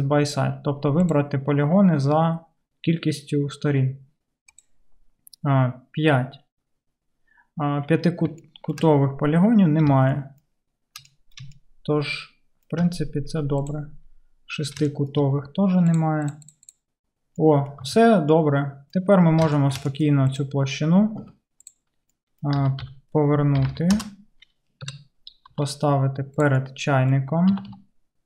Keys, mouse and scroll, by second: 17.9 Tab, 20.4-28.2 middle drag, 21.2 Delete, 22.6 r, 24.8 KP_1, 25.6 g, 27.5 g.